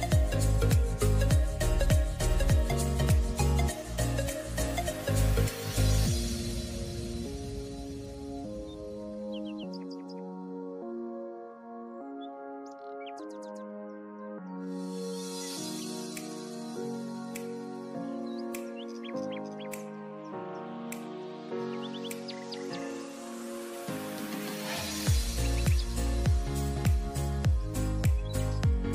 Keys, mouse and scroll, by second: 0.0 click, 0.2 scroll down 2, 0.5-1.0 scroll up 1, 1.0 click, 1.6 click, 2.2-4.3 drag, 4.9 click, 5.5-5.8 scroll up 3, 5.8-6.3 scroll down 2, 7.0-10.0 right drag, 10.0 click, 11.1 click, 12.8 click, 13.6 click, 13.7-14.7 right drag, 14.7 click, 17.9 click, 18.6-19.6 right drag, 19.6 click, 20.7 click, 21.3 click, 21.9 click, 22.7 right click, 23.5 click, 24.7 click, 25.1 click, 25.7-26.4 scroll down 2, 26.4 click, 27.3 click, 28.1 scroll up 1, 28.3-28.9 scroll down 3.